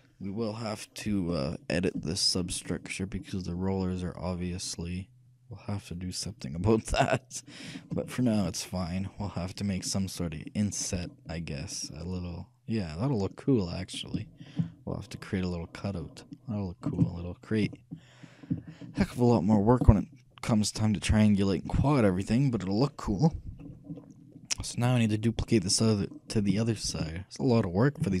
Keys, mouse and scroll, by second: 1.7 scroll down 1, 3.9-5.0 scroll up 1, 5.0 middle click, 7.8-8.2 scroll down 1, 8.2-10.8 shift+middle drag, 11.4-11.9 scroll up 1, 11.9-13.7 middle drag, 13.7-14.0 scroll up 1, 14.4-16.1 shift+middle drag, 17.4-20.4 shift+middle drag, 24.1-26.1 middle drag, 26.8-28.2 shift+middle drag.